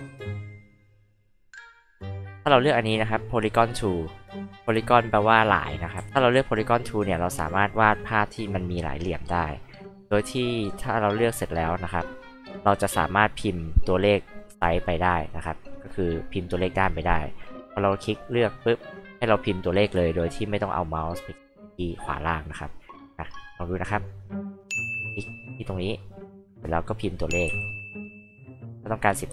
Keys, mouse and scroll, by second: 0.2 alt+click, 1.4 alt+click, 3.7 alt+click, 4.1-4.8 scroll down 2, 4.6 alt+h, 4.8-5.4 alt+drag, 5.9 alt+c, 6.5 alt+click, 7.6 alt+click, 9.3 alt+click, 10.3 alt+click, 11.2 alt+click, 17.2 alt+click, 18.6 alt+click, 23.9 alt+click, 25.2 alt+click.